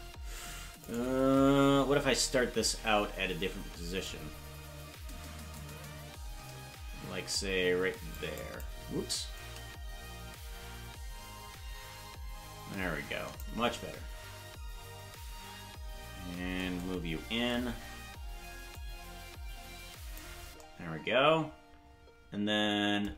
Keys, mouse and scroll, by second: 0.9 right click, 5.5-8.5 drag, 9.3-13.4 shift+drag, 18.7-20.2 drag.